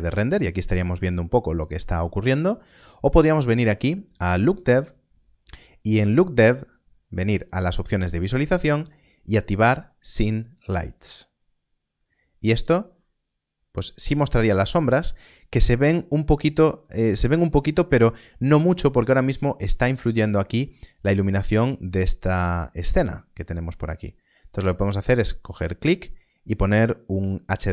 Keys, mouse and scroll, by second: 3.6 click, 7.2 click, 9.8 click, 12.7 r, 15.5 r, 15.5 click, 19.8 click, 24.2 click, 25.9 click.